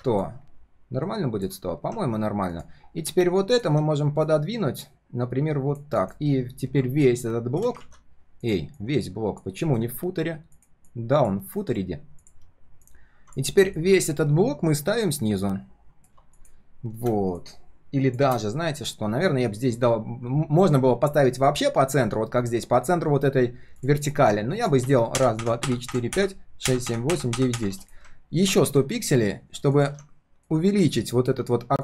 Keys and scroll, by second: 7.8 ctrl+z, 9.7 alt+l, 11.6 ctrl+shift+[.